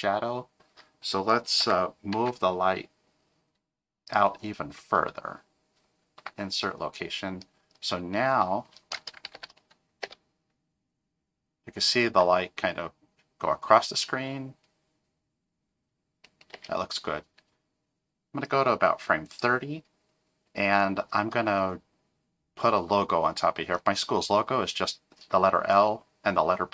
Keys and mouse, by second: 1.6 g, 6.2 i, 9.3 shift+Left, 10.0 space, 16.5 space, 18.4 click.